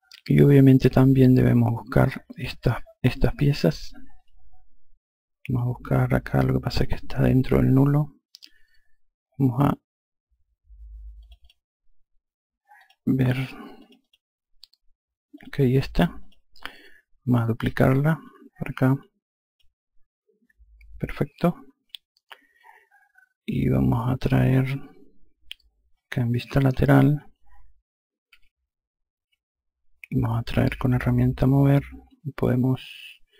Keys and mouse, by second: 4.0 click, 11.1 click, 12.7 click, 15.2 click, 18.1 ctrl+click, 26.7 F2, 28.2 F3.